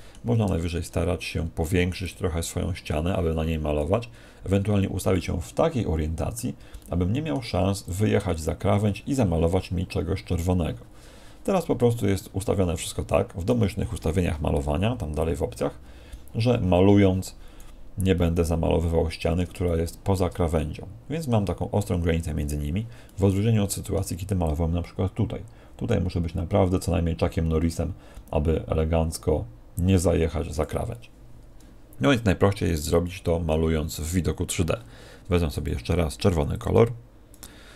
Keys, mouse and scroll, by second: 0.4-0.8 scroll up 4, 1.2-2.0 scroll up 6, 2.0 click, 2.0-2.6 scroll up 3, 4.4-5.8 scroll down 8, 5.0 middle click, 7.8 click, 11.9 click, 15.1 click, 18.1 middle click, 19.6 shift+middle click, 20.5 middle click, 23.0 middle click, 24.4 click, 33.0 middle click, 35.5 click, 37.2 click.